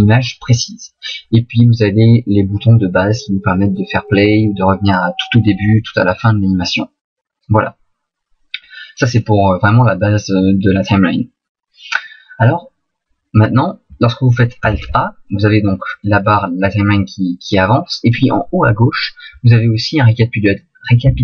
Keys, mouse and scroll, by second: 14.7 alt+a.